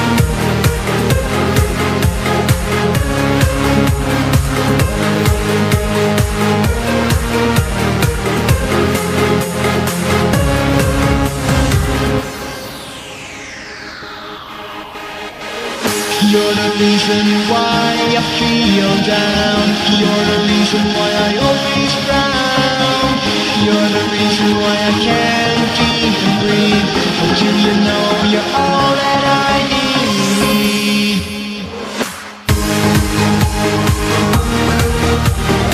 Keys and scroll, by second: 1.0 s, 2.0 g, 2.4 s, 6.9 p, 8.8 z, 10.5 p, 15.7 p, 17.7 z, 19.0 p, 20.8 p, 25.2 ctrl+s, 25.4 v, 31.8 v, 34.0 Right.